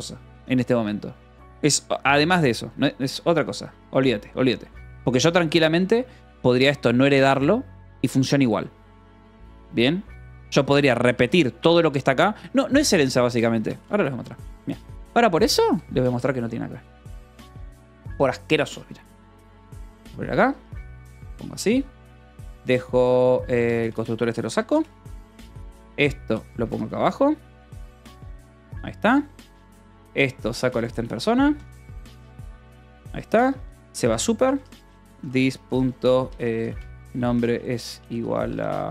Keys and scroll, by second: 5.8 Escape, 5.9 g, 6.4 j, 9.3-11.3 typing, 12.1 Escape, 12.3-21.8 typing, 14.7 Escape, 23.7 j, 24.2 d, 24.3 Escape, 25.1 ctrl+s, 25.4-38.9 typing, 26.4 Escape, 31.6 Escape.